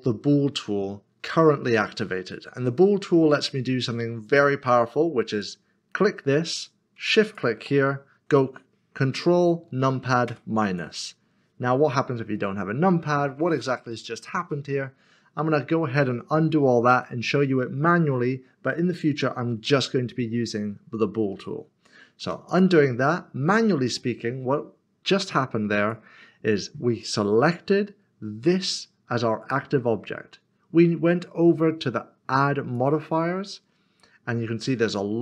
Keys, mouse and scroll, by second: 5.3 middle click, 10.3 ctrl+KP_Subtract, 12.4 middle click, 21.3 ctrl+z, 22.5 click, 23.1 middle click, 25.8 click, 32.7 click.